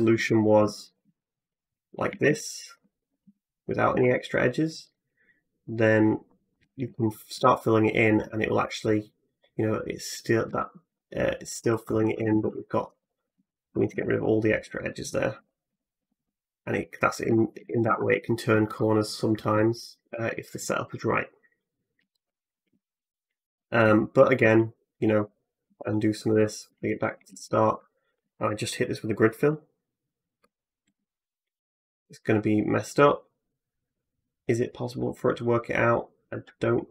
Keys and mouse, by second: 0.0 2, 0.6 alt+middle click, 0.9 x, 1.9 a, 2.1 a, 2.7 alt+middle click, 3.4-4.7 drag, 3.4 x, 3.7 a, 3.9 a, 4.7 middle click, 4.7 click, 5.5 middle click, 5.6-10.3 drag, 6.4 f, 6.7 f, 7.2 f, 10.3 f, 10.7 f, 11.4 f, 11.9 ctrl+z, 12.1 ctrl+z, 12.3 ctrl+z, 12.9 alt+click, 13.2 x, 13.6 a, 13.7 a, 14.3 middle click, 15.2 f, 15.5 f, 15.8 f, 16.0 f, 17.1 a, 17.7 a, 17.9-24.8 drag, 17.9 a, 23.7 ctrl+z, 24.2 ctrl+z, 24.7 ctrl+z, 25.5 ctrl+z, 26.3 alt+middle click, 26.6 x, 27.0 a, 27.2 a, 27.7-36.9 alt+drag, 27.7 alt+middle click, 27.7 alt+right click, 30.7 alt+f.